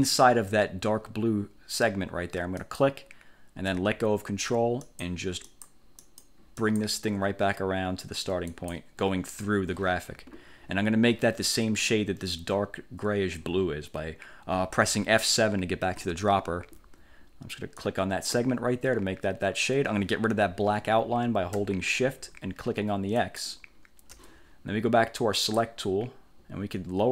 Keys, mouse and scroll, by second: 2.7 ctrl+click, 4.9 click, 5.6 click, 6.1 click, 6.7 click, 8.6 click, 16.0 F7, 17.9 click, 23.3 shift+click, 25.5 click.